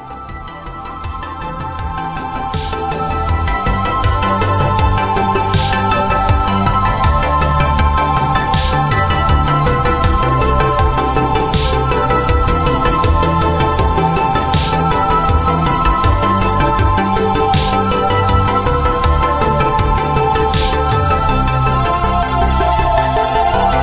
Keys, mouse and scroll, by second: 2.9 BackSpace, 4.6 click, 10.7 alt+shift+click, 11.6 click.